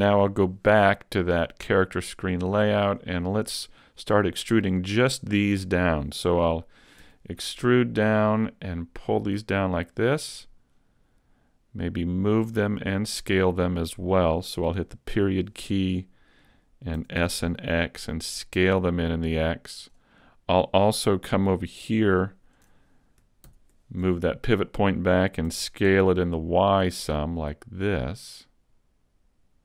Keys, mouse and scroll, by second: 1.4 click, 7.0 e, 7.5 click, 8.3 click, 12.4 click, 15.1 ., 17.0 s, 20.0 click, 23.5 ctrl+,, 25.5 s.